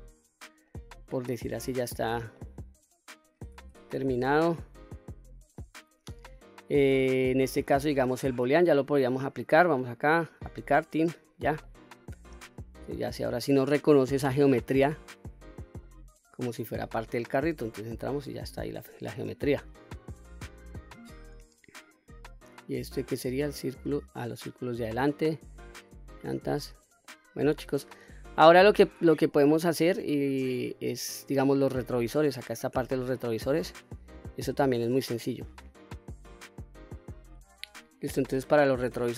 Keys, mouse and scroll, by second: 1.4 middle click, 2.4 middle click, 3.7 Tab, 4.4-5.0 scroll down 1, 5.0 scroll down 1, 5.6-7.7 middle drag, 9.8-10.6 drag, 11.3-11.6 scroll down 2, 11.6-12.2 middle drag, 12.4 click, 13.1-13.7 scroll up 1, 13.7-14.2 scroll down 2, 14.2-15.8 middle drag, 16.2 click, 17.4 Tab, 18.3 Tab, 19.1-19.8 scroll up 1, 19.8-20.3 scroll down 1, 20.3-21.0 scroll down 1, 23.4 click, 23.9 click, 26.6-27.0 middle drag, 27.5-28.2 middle drag, 28.6 scroll down 1, 29.8-30.3 shift+middle drag, 30.5-31.2 scroll up 2, 31.2-31.6 middle drag, 34.2-34.7 scroll down 2, 38.3-39.0 scroll up 2.